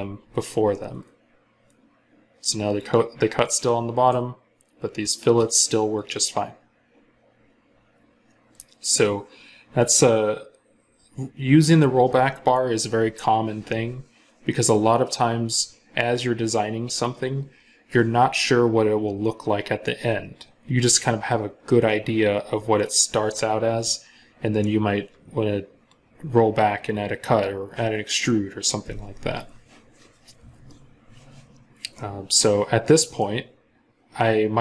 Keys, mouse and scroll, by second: 0.5 middle click, 31.8 middle click.